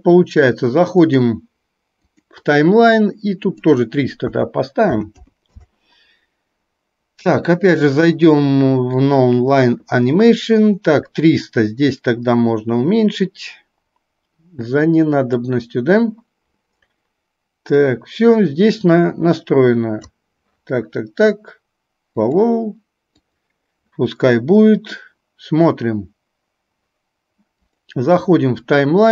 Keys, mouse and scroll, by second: 1.0-2.4 drag, 3.5 click, 7.7-9.3 drag, 12.2-15.5 drag, 17.9-20.2 drag, 22.3 click, 29.0 click.